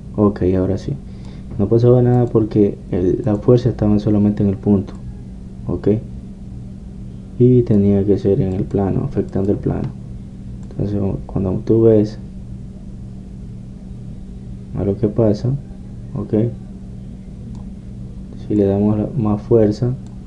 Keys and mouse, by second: 0.5-3.2 drag, 3.2-6.2 middle drag, 6.2-7.8 drag, 9.1 middle click, 9.6-13.4 drag, 13.4-19.7 middle drag, 19.7-20.2 drag.